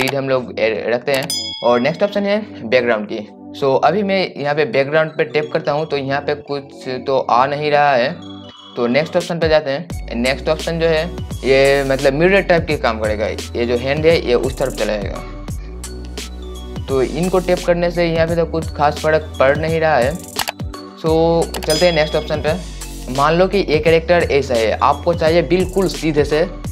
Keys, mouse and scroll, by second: 3.5 click, 12.4-17.1 drag, 23.4-24.4 drag.